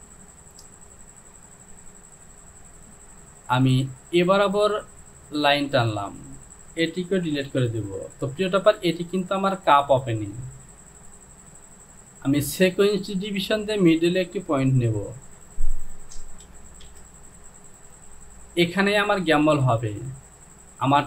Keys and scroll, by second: 7.4 Delete, 16.6 KP_2, 16.9 Return.